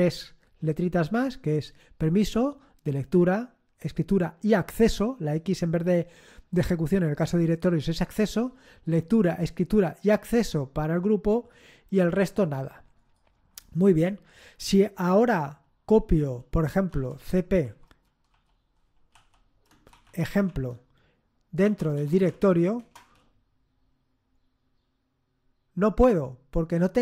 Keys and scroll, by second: 16.9 typing, 19.4-22.5 typing, 22.7 Return.